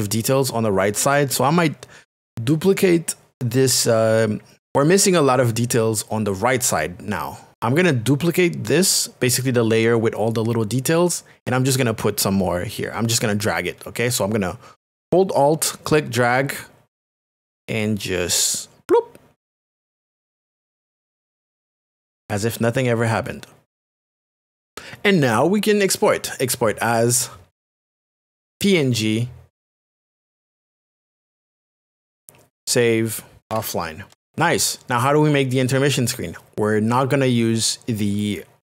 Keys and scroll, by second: 33.1-34.0 typing, 34.1 Return.